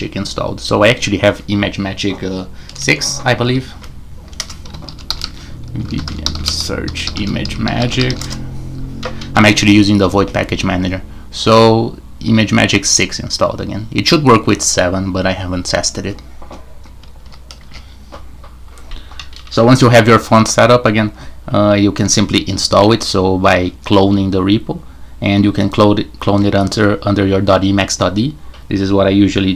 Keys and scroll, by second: 3.4 super+2, 4.4 super+Return, 4.5-8.7 typing, 17.2 super+q, 17.6 shift+super+Tab.